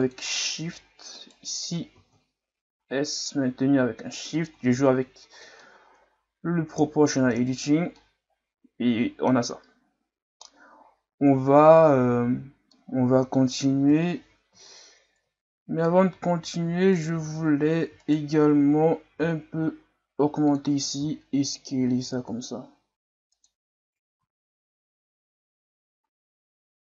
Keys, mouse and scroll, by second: 0.4 middle click, 1.1 alt+right click, 1.9 s, 4.7 Tab, 5.4 scroll down 1, 5.6-7.6 middle drag, 7.6-8.0 scroll down 4, 8.0-11.0 middle drag, 12.7-13.9 middle drag, 13.9 KP_3, 14.7-16.0 shift+scroll up 7, 16.2-16.5 scroll down 1, 16.5-16.9 scroll up 1, 16.9 right click, 17.1 Tab, 18.0 alt+right click, 19.1 g, 21.0 s, 23.7 Tab, 24.2 a.